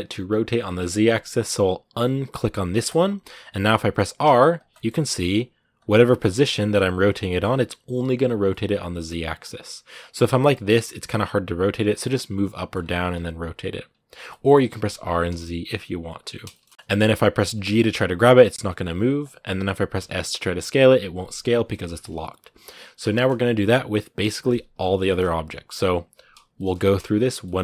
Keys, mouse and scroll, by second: 3.5-4.0 scroll down 1, 4.0 r, 4.5 middle click, 4.8 r, 5.7 scroll up 1, 5.7 middle click, 6.1 r, 7.1 middle click, 7.3 r, 8.2 scroll down 2, 8.3 middle click, 9.0 r, 9.9 scroll up 1, 9.9 middle click, 10.5 r, 11.7 scroll down 3, 11.8 middle click, 12.5 scroll up 4, 12.8 r, 14.1 middle click, 14.7 r, 16.3 shift+middle click, 17.2 g, 21.4 scroll down 3, 21.5-24.0 shift+middle drag, 24.0 right click, 24.1 scroll down 2, 24.9 shift+middle click, 25.0 scroll up 2, 26.3-27.4 shift+middle drag, 27.4 scroll up 1, 27.5 shift+middle click.